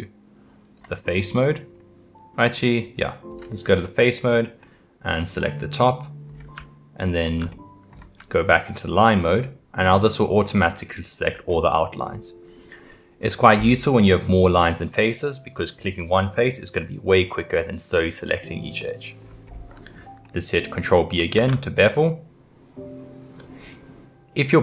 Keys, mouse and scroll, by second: 0.7 click, 1.2-3.3 middle drag, 3.3 click, 4.6-8.2 middle drag, 8.2-9.3 scroll up 1, 9.3-10.9 drag, 10.9 middle click, 11.5-12.0 scroll up 1, 12.0-13.7 scroll down 3, 18.8 middle click, 19.5-20.2 scroll up 2, 20.2-21.4 middle drag, 21.4 ctrl+b.